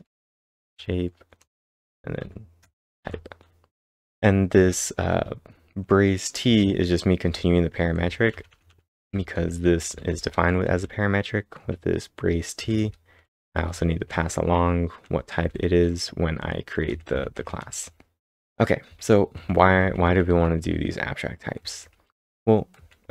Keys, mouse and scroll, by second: 0.0-3.0 typing, 4.1-5.1 typing, 6.4 l, 7.7-12.6 typing, 16.6-17.4 typing.